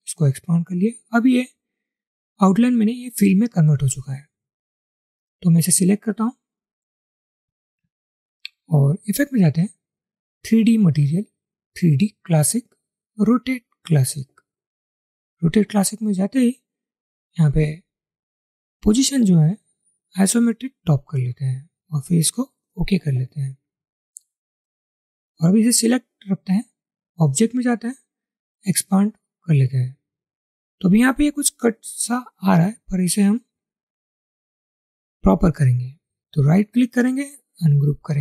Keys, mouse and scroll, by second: 36.4 right click.